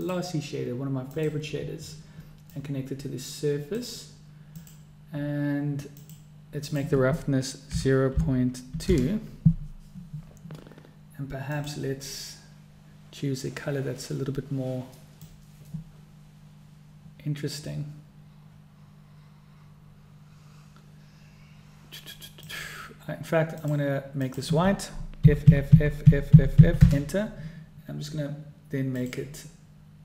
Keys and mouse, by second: 3.3-4.7 drag, 5.3 click, 6.7 drag, 7.4-11.3 drag, 12.3 click, 26.1 f, 26.8 f, 27.2 f.